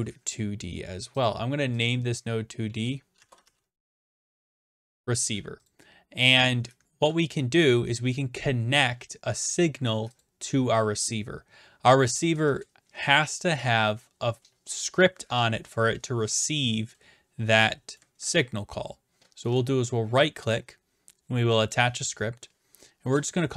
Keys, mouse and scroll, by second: 1.2 click, 2.8 click, 3.2-5.1 typing, 5.7-6.7 drag, 10.2-11.2 drag, 19.6 right click, 21.7 click.